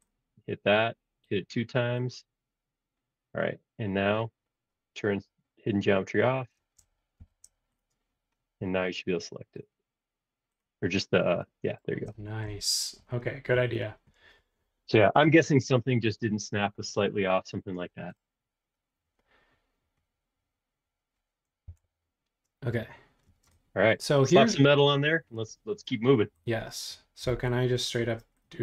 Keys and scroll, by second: 7.2 shift+g, 21.7 l, 23.2 space, 27.2 b.